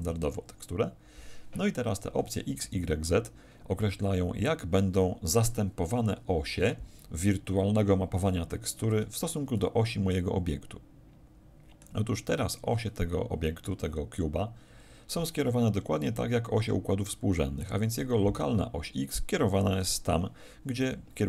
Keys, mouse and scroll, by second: 8.6 Escape, 9.5 middle click, 16.0 middle click.